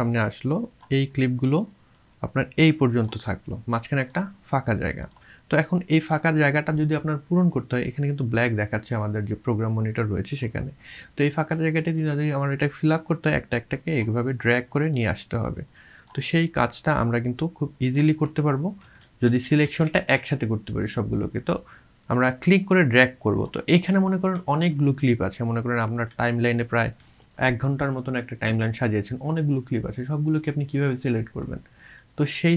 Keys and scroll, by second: 18.8 ctrl+z, 19.2 ctrl+z, 19.6 ctrl+z.